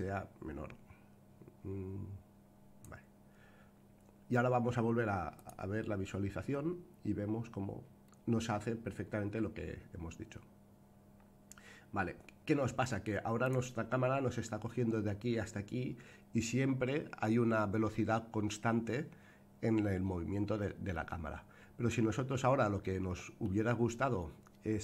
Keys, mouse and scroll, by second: 5.3 click, 6.4 space, 13.4 click, 20.9-23.4 middle drag.